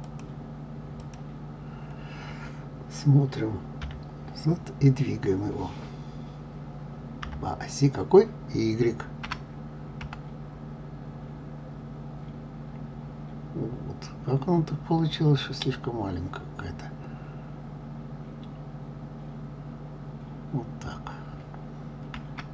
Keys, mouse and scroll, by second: 0.1 click, 1.0 click, 3.8 KP_Divide, 7.2 KP_3, 9.3 g.